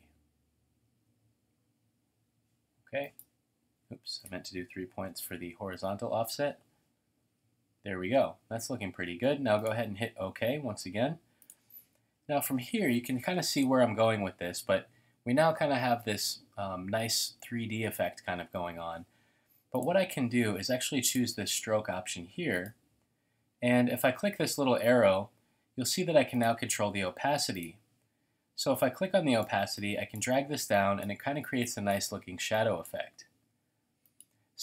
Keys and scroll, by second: 3.8 3, 4.9-5.9 typing, 12.1 typing.